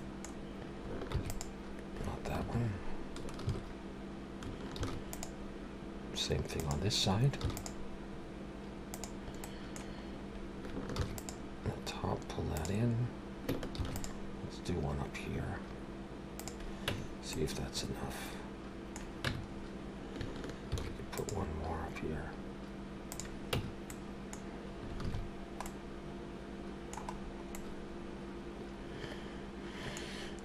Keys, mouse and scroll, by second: 1.1 ctrl+r, 3.4 ctrl+z, 4.8 ctrl+r, 7.4 ctrl+r, 9.4 middle click, 10.0-10.4 scroll up 2, 10.9 ctrl+r, 13.7 ctrl+r, 16.9 Tab, 17.3 middle click, 19.3 Tab, 19.5-20.1 scroll up 2, 20.7 ctrl+r, 23.5 Tab, 23.9 middle click, 25.0 alt+a, 25.2-26.5 scroll down 2, 25.7 middle click, 27.2-28.0 scroll down 2, 27.5 middle click.